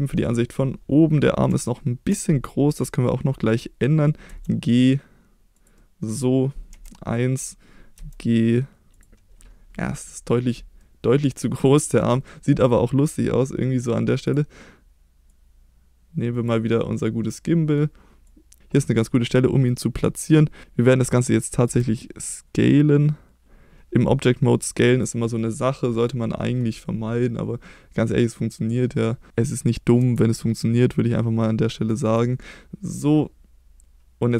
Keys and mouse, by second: 1.7-2.8 shift+middle drag, 4.3 g, 5.5 drag, 5.7-6.1 middle drag, 6.7 KP_1, 7.9 g, 8.9 drag, 10.0-10.5 middle drag, 10.8-11.2 middle drag, 16.6-17.8 middle drag, 18.3 click, 18.6 middle click, 21.6 s, 24.9 click, 25.4-26.6 middle drag, 28.2-30.0 drag, 30.0 s, 32.0 click, 32.5-34.3 middle drag.